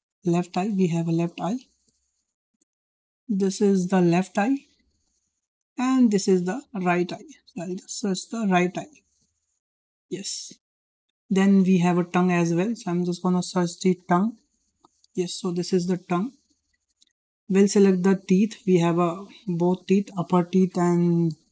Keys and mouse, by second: 0.5 BackSpace, 0.7 BackSpace, 5.5-10.2 drag, 12.1-16.4 drag, 18.6 click, 19.5-21.5 drag.